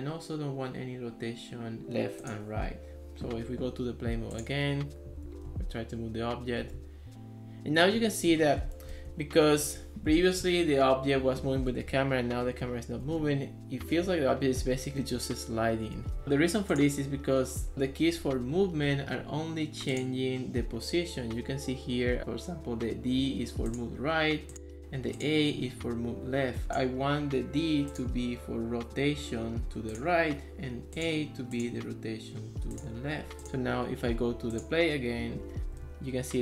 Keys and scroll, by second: 5.1-6.8 typing, 8.0 d, 9.1 w, 9.6 d, 10.4 s, 11.4-16.2 typing, 35.6-36.4 typing.